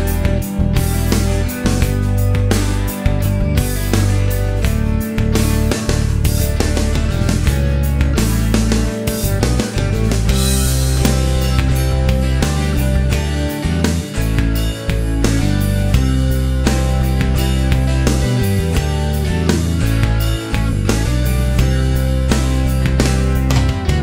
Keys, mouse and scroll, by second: 0.7-2.2 drag, 3.1-4.3 drag, 4.4 middle click, 4.9 scroll up 1, 4.9-6.4 middle drag, 6.4-8.3 scroll up 1, 9.3 click, 10.1 click, 11.2 click, 12.2 click, 12.8 scroll down 1, 13.1-14.6 middle drag, 14.6-18.6 scroll down 1, 18.6-19.8 middle drag, 19.8-20.4 scroll down 1, 20.4-21.8 middle drag, 21.8 scroll down 1, 22.0-22.5 scroll up 1, 22.5 scroll down 1, 22.5 scroll up 1, 22.8 middle click.